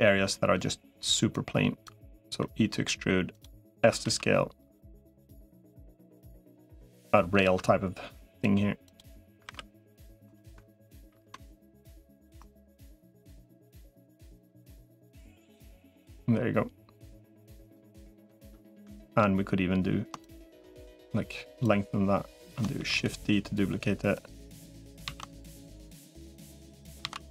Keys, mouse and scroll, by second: 1.1 click, 2.1 e, 3.7 s, 5.1 s, 5.5-6.7 drag, 7.3 ctrl+r, 9.3 ctrl+r, 10.9 ctrl+r, 12.9 3, 13.7-16.9 drag, 17.3 3, 17.5 click, 17.8 middle click, 18.8 shift+middle click, 20.1 shift+click, 21.5 click, 22.7 shift+e, 24.1 click, 24.9 ctrl+z, 26.3 click, 26.9 ctrl+z.